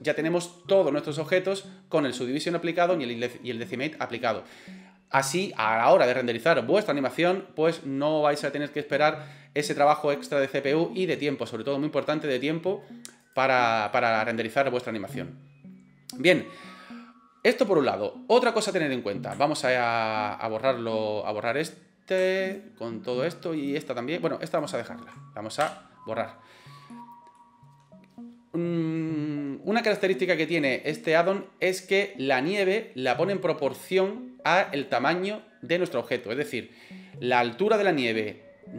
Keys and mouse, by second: 13.2 right click, 13.9-14.8 middle drag, 21.5 click, 22.5 shift+click, 23.6 shift+click, 24.5 shift+click, 25.6 Delete, 26.9-27.4 middle drag.